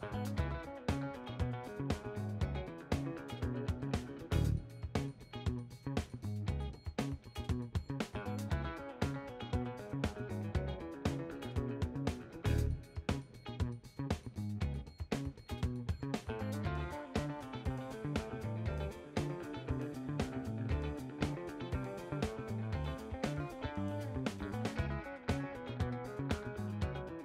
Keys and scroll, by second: 11.4 w, 14.1-15.1 typing, 17.5-18.7 typing.